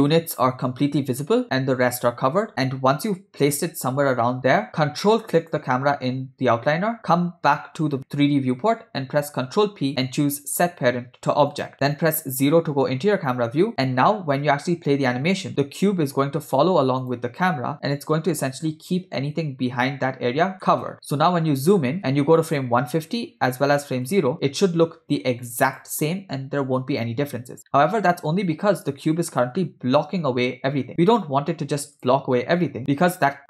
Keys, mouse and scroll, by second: 5.4 ctrl+click, 9.6 ctrl+p, 12.4 KP_0, 14.8 space, 17.0 click, 19.9 space, 20.7-21.9 ctrl+middle drag, 22.5 click, 24.1 click, 25.7 click, 27.8-28.5 ctrl+middle drag, 32.2 click.